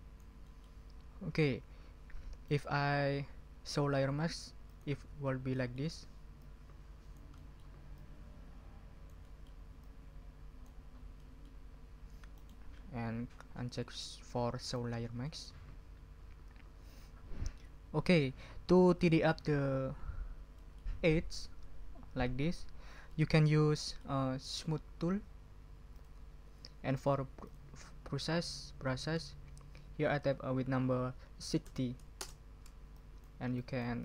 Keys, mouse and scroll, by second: 0.5 middle click, 5.2 ctrl+scroll down 2, 6.0 ctrl+scroll up 2, 6.4 ctrl+click, 7.4 middle click, 8.0-9.6 drag, 9.3 middle click, 9.5 right click, 9.8-10.8 drag, 10.8 ctrl+scroll down 2, 11.2 ctrl+middle click, 11.4 ctrl+scroll up 1, 12.3-12.7 scroll up 1, 14.6 click, 15.2-15.6 scroll up 1, 19.5 ctrl+scroll up 2, 20.5 middle click, 23.1-24.2 middle drag, 25.9 click, 26.9 click, 27.4 click, 29.0 ctrl+a, 31.1-32.1 typing, 32.2 Return, 32.9-33.4 drag, 33.5-34.0 drag.